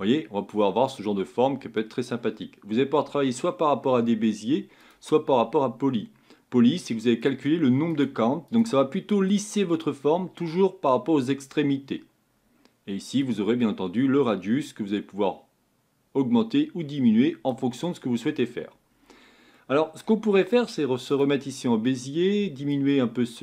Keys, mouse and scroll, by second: 0.9-4.8 middle drag, 4.8 click, 7.3-16.2 drag, 21.1 click, 22.9-23.4 drag.